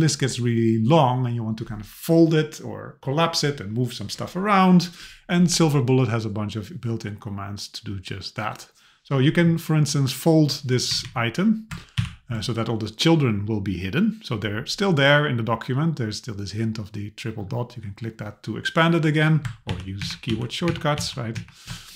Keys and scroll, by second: 10.9 Left, 12.0 ctrl+alt+[, 19.7 ctrl+alt+[, 20.0 ctrl+alt+], 20.3 ctrl+alt+[, 20.7 ctrl+alt+], 21.0 ctrl+alt+[, 21.4 ctrl+alt+].